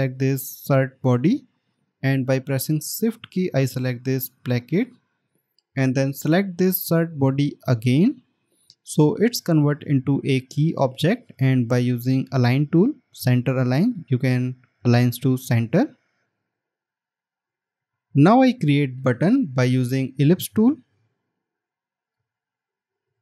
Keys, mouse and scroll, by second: 5.2 shift+click, 21.4 right click.